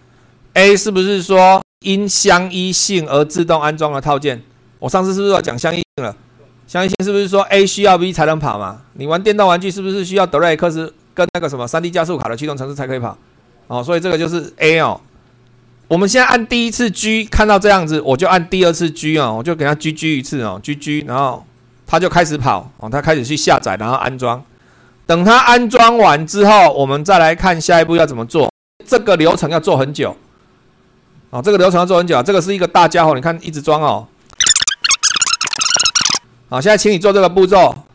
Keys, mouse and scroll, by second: 21.2 g.